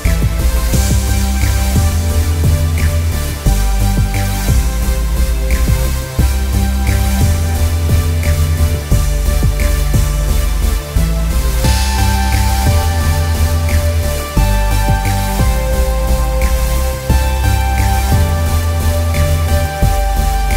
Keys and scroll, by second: 8.4 ctrl+j, 8.6 ctrl+t, 12.4 Return, 14.7 ctrl+j, 15.2 t, 19.5 Return, 20.1 ctrl+j.